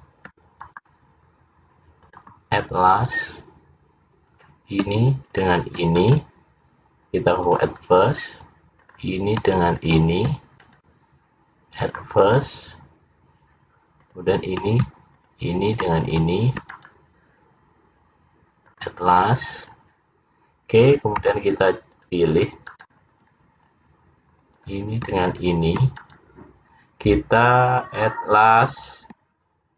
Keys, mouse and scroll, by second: 0.7 right click, 2.3 shift+click, 3.0-3.8 scroll down 3, 4.3 click, 5.5 shift+click, 6.1 right click, 8.9 click, 9.9 shift+click, 10.7 right click, 14.1 click, 15.3 click, 16.1 shift+click, 16.6 shift+click, 16.7 right click, 19.6 click, 21.2 c, 23.3-24.3 scroll up 4, 24.3-24.6 scroll up 1, 24.6 click, 25.3 shift+click, 26.0 right click.